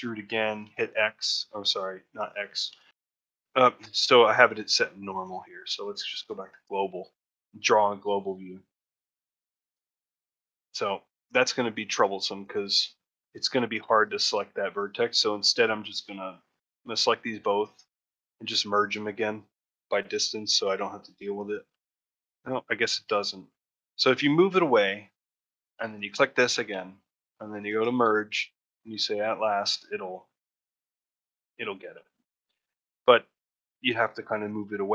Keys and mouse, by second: 6.2 click, 8.7 click, 13.9 click, 14.7 click, 15.7 click, 16.3 click, 20.5 click, 25.8 shift+click, 29.8 click, 31.5 click.